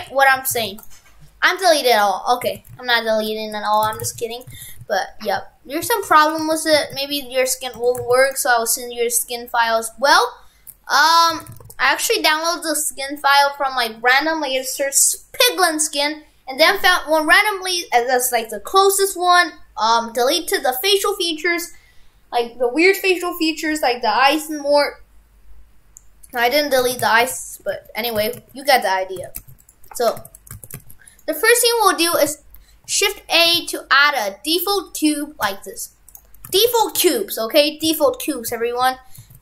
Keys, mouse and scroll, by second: 0.0 shift+f, 2.6 shift+f, 3.9 shift+f, 4.7 shift+f, 6.9 shift+f, 7.9 shift+f, 11.4 shift+f, 26.9 shift+f, 28.3 shift+f, 29.3 shift+f, 30.7 shift+f, 32.3 shift+a, 33.6 shift+a, 36.5 shift+f.